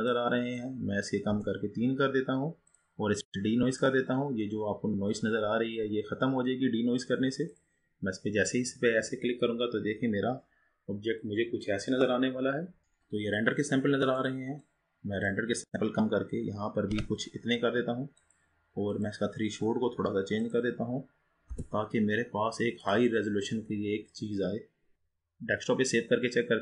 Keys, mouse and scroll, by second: 1.8-7.6 drag, 12.8 scroll down 2, 15.4-26.6 drag.